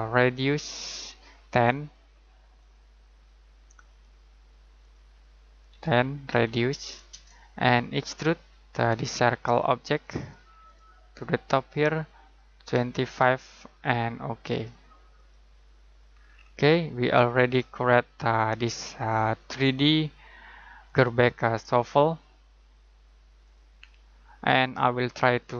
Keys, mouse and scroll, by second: 5.7-6.3 typing, 7.1 Return, 10.0 click, 12.5-13.7 typing, 14.5 click, 16.1 scroll down 1, 16.3-18.9 scroll up 1, 18.9-19.4 scroll down 1, 20.8 click, 23.4 click, 25.2-25.5 scroll down 1.